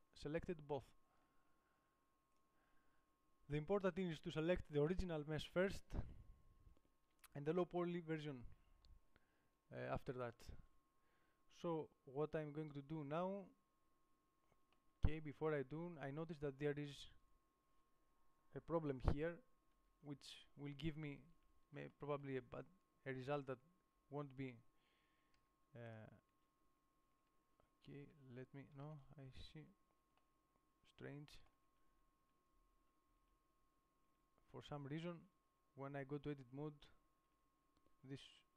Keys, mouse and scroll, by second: 1.1 g, 15.3 middle click, 15.9-20.3 middle drag, 21.0 Tab, 21.7 Tab, 23.6-25.2 drag, 25.3 click, 25.7 g, 26.1 right click, 26.7 Tab, 28.2 a, 28.4 a, 29.1 a, 29.4 Tab, 30.0 Tab, 32.0 Tab, 33.0 Tab, 33.5 Tab, 34.4 Tab, 35.5 Tab, 36.6 Tab, 37.7 Tab.